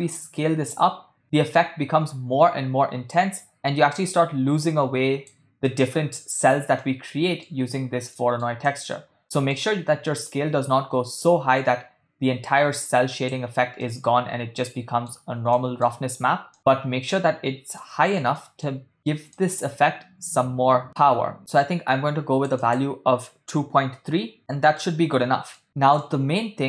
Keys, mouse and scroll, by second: 5.8 middle click, 6.8 middle click, 8.2 middle click, 8.7 click, 9.2 middle click, 10.3-13.5 drag, 13.9-15.2 middle drag, 15.6-16.0 ctrl+middle drag, 16.5 ctrl+middle click, 17.8-18.2 middle drag, 18.4 ctrl+middle drag, 19.3-24.4 drag, 21.9 ctrl+middle click, 24.5 middle click, 26.0 middle click.